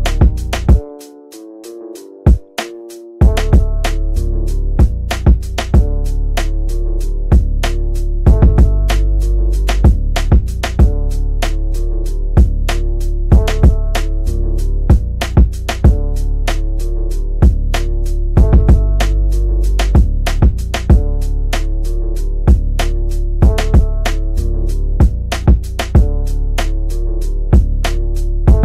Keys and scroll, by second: 4.3 ctrl+z, 19.2 ctrl+z, 24.4 g.